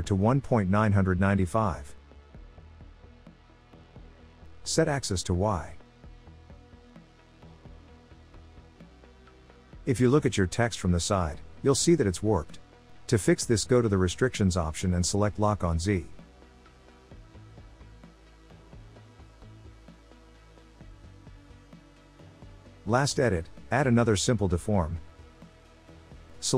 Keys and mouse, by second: 0.1-6.2 drag, 2.9 9, 6.9 click, 9.7 click, 16.0 click, 18.1-22.0 drag, 23.4-25.4 drag.